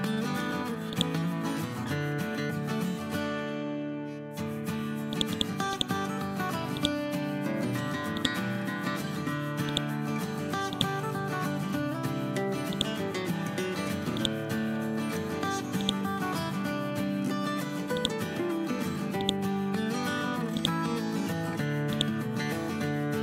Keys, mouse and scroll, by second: 0.9-3.3 drag.